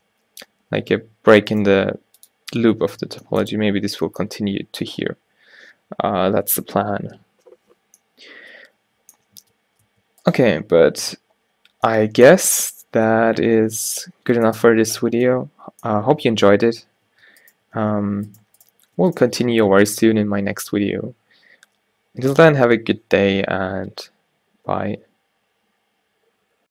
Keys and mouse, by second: 1.6-5.1 drag, 1.9 g, 8.2 middle click, 9.5 Tab, 10.0 Tab, 11.1 Tab, 17.2 Tab, 17.7 g.